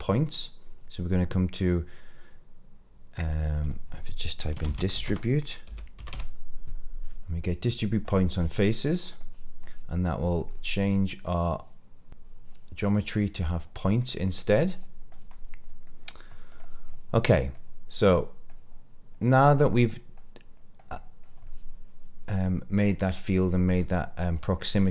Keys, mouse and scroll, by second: 9.6 middle click, 10.4-14.2 middle drag, 14.6 click, 15.3 middle click, 15.9-16.2 scroll down 2, 16.2 middle click, 17.5 click, 18.4 click, 19.5 click, 20.1 click, 20.9 middle click, 21.4-22.8 middle drag, 23.0 middle click, 23.7-24.1 scroll up 2, 24.1 middle click.